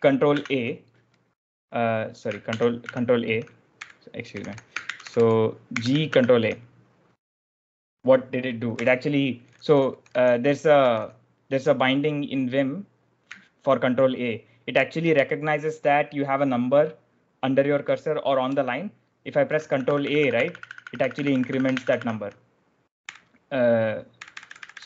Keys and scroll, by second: 0.3 ctrl+r, 2.4 ctrl+r, 2.7 ctrl+a, 3.4-5.6 typing, 6.0 ctrl+a, 8.7-11.2 typing, 13.7 typing, 19.4 ctrl+a, 19.5 ctrl+a, 22.9-24.8 typing.